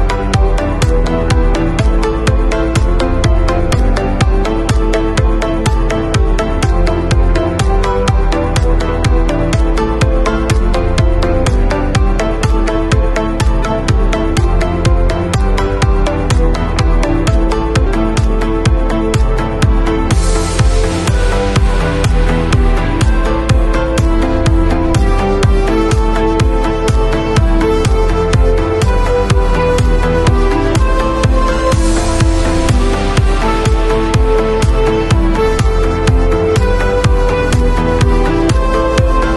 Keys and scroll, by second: 19.8 b, 25.7 ], 27.0 x, 35.5 v.